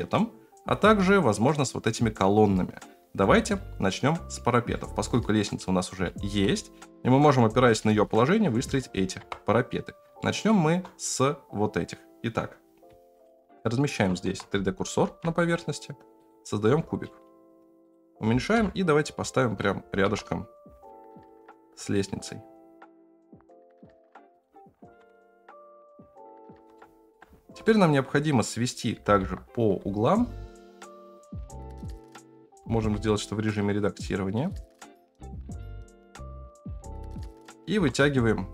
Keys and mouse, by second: 4.7-5.1 middle drag, 5.6-6.0 middle drag, 6.6-7.7 shift+middle drag, 8.1-8.7 middle drag, 9.2 KP_0, 10.2 shift+drag, 13.1 shift+click, 15.0 shift+a, 16.6 s, 16.7-18.5 middle drag, 18.5 KP_7, 20.0 KP_Decimal, 21.1 g, 25.0 KP_0, 26.7 middle click, 27.6 middle drag, 28.9 g, 31.3 g, 31.5 g, 31.7 shift+middle click, 31.9 alt+z, 32.5 g, 35.2 s, 35.5 g, 36.0 s, 36.2 g, 36.8 ctrl+a, 37.0 Tab, 37.8 3.